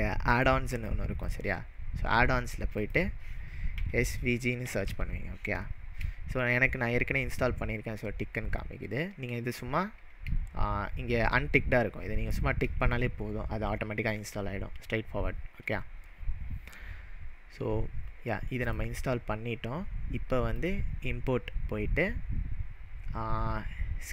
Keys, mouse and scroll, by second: 0.2 click, 3.8-5.3 typing, 18.6 click, 20.6-23.6 drag.